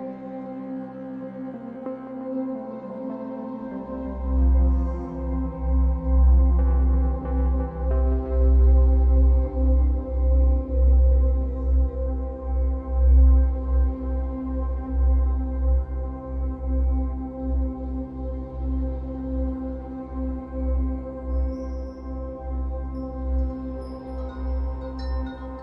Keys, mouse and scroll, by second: 0.5-1.1 scroll up 2, 1.1-1.6 scroll up 1, 1.6 scroll up 1, 1.8-6.8 drag, 5.9-6.8 scroll down 2, 6.8-8.7 middle drag, 7.1-7.5 scroll up 2, 8.7-11.0 drag, 11.0-12.6 middle drag, 12.6-15.1 drag, 14.6-15.1 scroll down 1, 15.1-17.4 shift+middle drag, 15.5 scroll up 1, 16.4-17.4 scroll up 1, 17.4-19.9 drag, 19.9-21.0 middle drag, 21.0-23.6 drag, 23.6-24.9 middle drag, 24.9-25.6 drag.